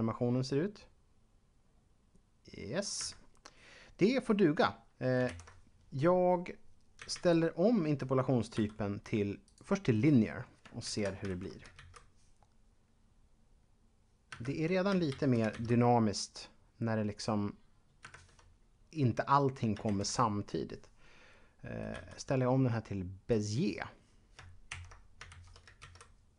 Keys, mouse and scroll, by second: 3.0 Escape, 5.3 ctrl+Up, 8.5 t, 9.4 click, 10.8 ctrl+Up, 11.3 shift+Left, 11.6 alt+a, 14.3 Escape, 15.1 shift+Left, 18.0 Escape, 19.9 ctrl+Up, 23.3 click, 24.6 ctrl+Up, 25.3 shift+Left, 25.8 alt+a.